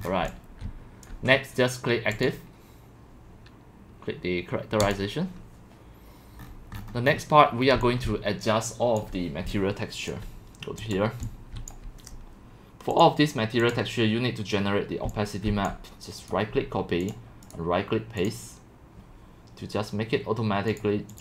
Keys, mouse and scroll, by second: 0.7 c, 1.1-6.4 drag, 6.4-7.8 scroll, 7.5-10.2 typing, 9.0 click, 10.9 click, 11.3-11.6 typing, 11.7-13.0 drag, 13.7 click, 15.7 click, 16.3 right click, 18.3-21.2 drag.